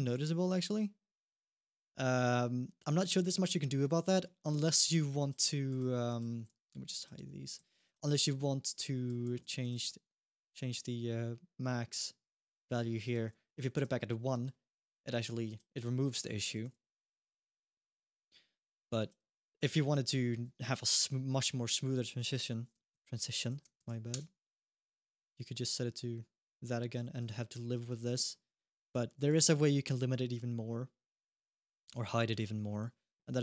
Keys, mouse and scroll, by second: 4.0 middle click, 4.4 alt+g, 5.0 click, 5.5 click, 5.8 click, 6.2 h, 6.7 click, 7.3 h, 7.6 click, 9.0 alt+h, 9.4 click, 12.8 click, 14.1-14.7 scroll down 1, 14.7 middle click, 15.2 click, 15.6 scroll up 1, 15.9 middle click, 16.3 g, 19.1 ctrl+z, 22.0 click, 24.8-26.6 scroll down 1, 26.6-27.0 scroll down 1, 27.0 click, 27.4 scroll up 1, 27.7 g, 28.9 middle click, 29.1 g, 31.3-32.1 scroll up 1, 32.1 click, 33.2 click.